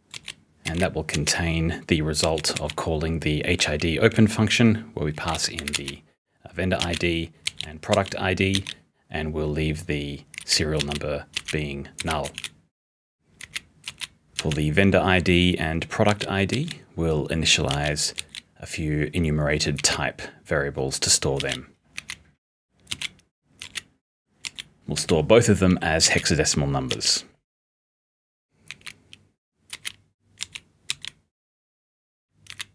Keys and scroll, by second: 2.0-2.7 typing, 4.9-9.0 typing, 10.4 p, 12.0-14.4 typing, 15.8-20.3 typing, 24.2-27.4 typing, 28.7 p, 30.4 s, 32.2-32.7 typing.